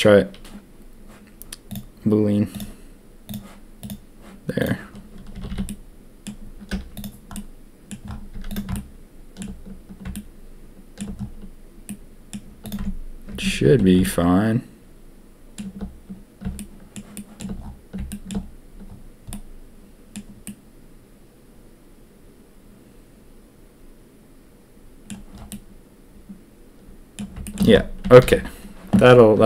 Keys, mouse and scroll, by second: 1.6-2.6 drag, 3.2 click, 4.5 click, 5.3 a, 5.4 a, 5.6-6.2 drag, 6.7 z, 7.3-7.8 middle drag, 8.3 z, 8.7-9.4 shift+middle drag, 10.1-10.9 shift+middle drag, 11.8 click, 12.6 click, 12.7 Tab, 13.3 Tab, 13.5 a, 13.7 a, 14.0-15.5 shift+drag, 16.5-16.9 shift+drag, 17.1 shift+drag, 18.1 shift+drag, 19.3-20.1 middle drag, 20.4-25.0 middle drag, 25.4-27.1 middle drag, 27.4 shift+middle drag, 28.2 ctrl+s.